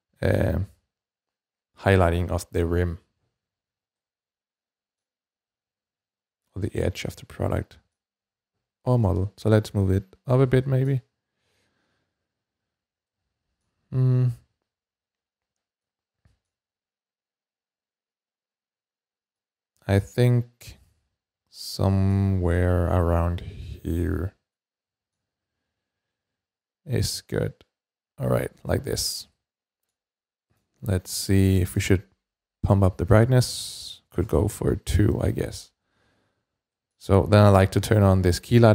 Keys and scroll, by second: 31.4 typing, 31.6 Return, 33.7-34.1 typing, 34.1 Return, 36.3 typing.